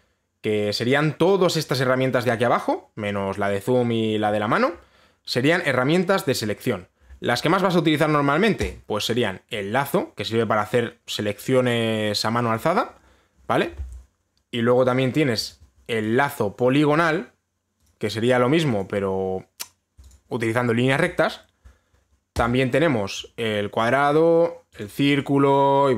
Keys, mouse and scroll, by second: 9.3 click, 13.1 click, 16.1 click, 17.2 click, 17.7 click, 18.5 click, 19.0 click, 19.4 click, 20.7 click, 23.1 click, 24.4 click, 25.4 click.